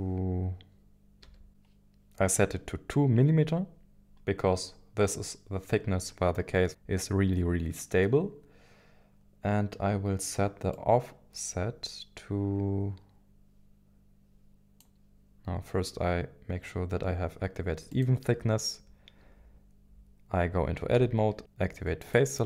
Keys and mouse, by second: 10.7-14.9 drag, 17.9-20.9 drag, 20.9 Tab, 22.0 click.